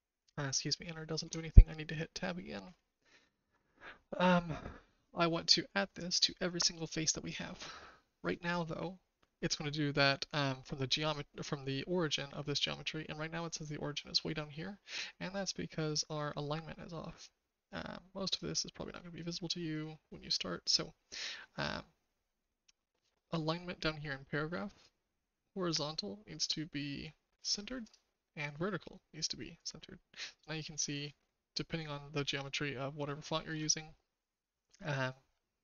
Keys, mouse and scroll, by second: 1.2 Tab, 3.2 shift+middle click, 15.8 click, 18.3 click, 25.6-28.0 drag, 28.4-29.7 drag, 32.5-33.5 shift+middle drag.